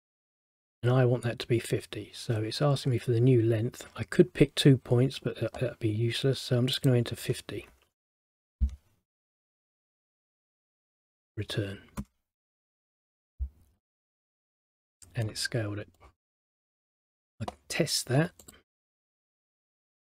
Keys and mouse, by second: 0.0 click, 6.9 click, 15.1 middle click, 16.1 middle click, 16.9 middle click, 18.6 click, 19.6 click.